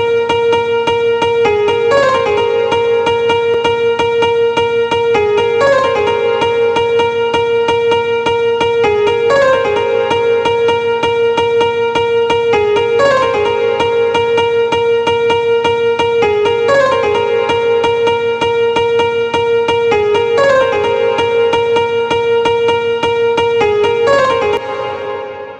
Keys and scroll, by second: 24.0 space.